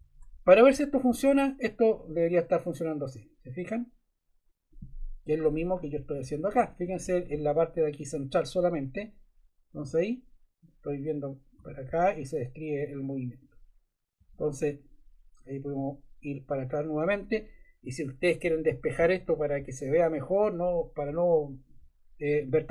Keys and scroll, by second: 6.0 Right, 9.6 Right, 9.8 Left, 14.3 Right.